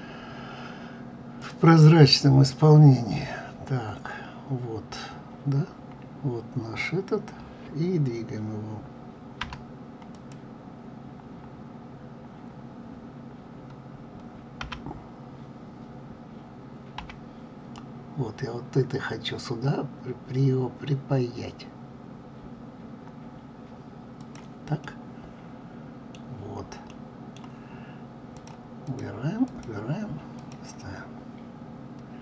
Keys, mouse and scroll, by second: 1.4 click, 1.9 click, 5.0-6.0 scroll up 2, 6.0-6.6 scroll down 1, 9.4 g, 10.1 click, 14.6 g, 24.8-28.3 middle drag, 28.3 click, 28.9 click, 29.4 click, 30.4 click, 31.1 scroll up 2, 31.8-32.2 scroll down 1.